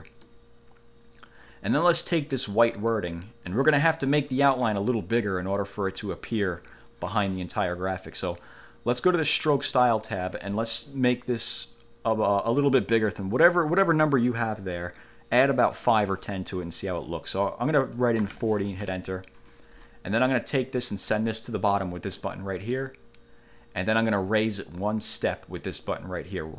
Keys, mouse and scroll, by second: 0.4-1.6 drag, 2.9 click, 9.8 click, 18.4 4, 19.0 Return, 23.0 click.